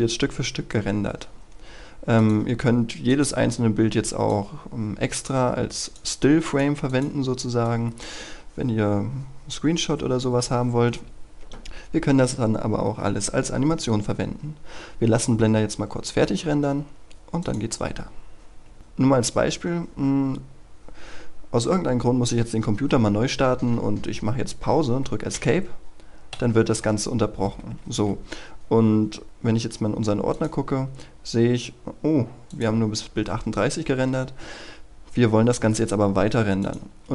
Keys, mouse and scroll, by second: 7.4 scroll down 1, 7.7 scroll up 1, 12.2 scroll down 1, 12.5 scroll up 1, 17.3 click, 25.2 Escape, 30.2 click, 31.3-31.7 scroll down 2, 32.4 click.